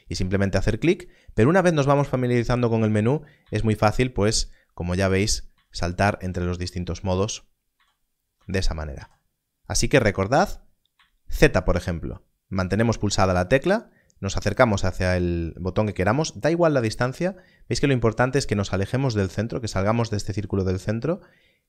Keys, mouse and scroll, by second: 1.5 ctrl+Tab, 2.2 click, 3.4 z, 5.1 click, 5.5 Left, 5.6-8.9 typing, 9.6 click, 10.9 z.